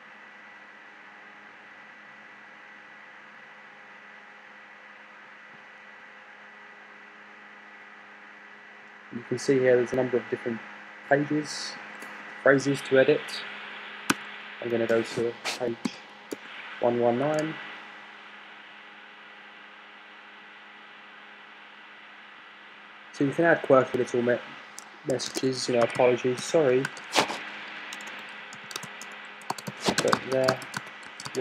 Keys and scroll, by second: 11.9 Right, 12.4 Left, 12.9 BackSpace, 14.7 3, 16.9 Return, 16.9 typing, 18.1-18.9 typing, 26.0-27.5 typing, 28.5-31.4 typing.